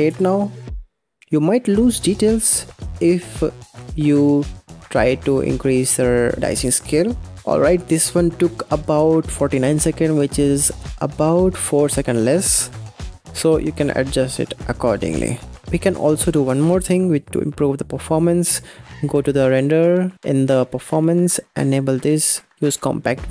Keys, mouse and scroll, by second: 16.1 click, 17.1 click, 17.9-18.9 scroll down 6, 20.7 click, 20.9-23.3 scroll down 3.